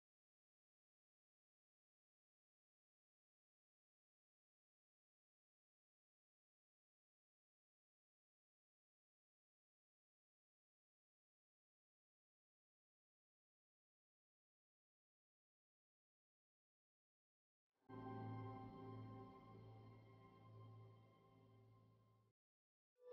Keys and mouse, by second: 0.0 Escape, 4.7 KP_Divide, 8.0 Tab, 11.4-16.2 middle drag, 16.2 click, 16.6-22.1 right drag, 22.1 ctrl+e, 22.1 click.